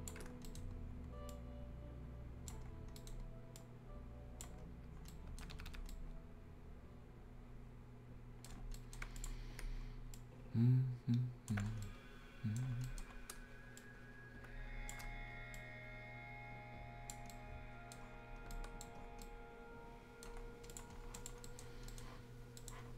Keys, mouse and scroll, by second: 0.3 shift+scroll up 1, 0.4 shift+right click, 0.8-1.3 shift+scroll up 1, 1.3-2.7 shift+drag, 2.7 shift+scroll down 1, 2.9 shift+right click, 3.5-4.9 shift+drag, 4.9 shift+scroll down 1, 5.1 shift+right click, 5.3 shift+Escape, 5.8 shift+scroll up 1, 5.9-8.5 shift+right drag, 8.5 shift+scroll down 3, 8.7 shift+right click, 9.1-11.6 shift+drag, 11.6 scroll up 1, 11.8 right click, 12.6 scroll down 1, 12.8 right click, 13.7-17.3 drag, 17.3 right click, 18.0 scroll up 1, 18.5 Escape, 19.0 scroll up 1, 19.2 right click, 20.3 scroll down 1, 20.7 click, 20.9 scroll down 1, 21.1 click, 21.4 right click, 21.6 scroll down 1, 21.8 right click, 22.8 scroll up 1.